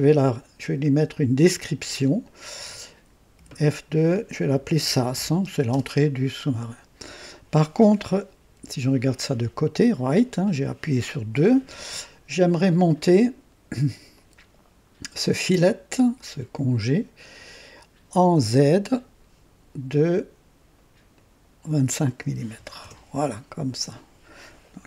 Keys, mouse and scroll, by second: 2.2 click, 3.4 F2, 4.3-5.7 typing, 8.5 typing, 10.4-11.3 right drag, 14.1 click, 16.7 click, 17.2 click, 21.1 click, 22.4 KP_2, 22.5 KP_5, 22.9 KP_Enter.